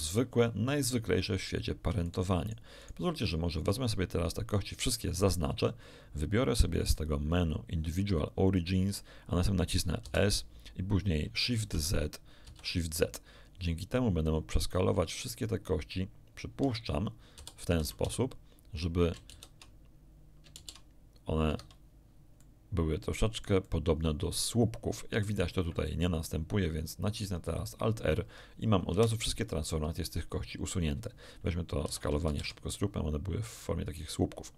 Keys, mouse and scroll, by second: 2.0 shift+right click, 2.4 shift+right click, 2.8 shift+right click, 6.7 click, 8.4 click, 10.0 s, 11.6 shift+z, 12.4 shift+z, 16.6 Escape, 17.3 s, 17.8 z, 18.0 z, 19.2 shift+z, 20.5 shift+z, 21.4 Escape, 22.4-25.5 middle drag, 27.4 alt+r, 28.8 alt+1, 30.1 shift+middle click, 31.8 shift+s, 32.2 shift+z, 34.4 click.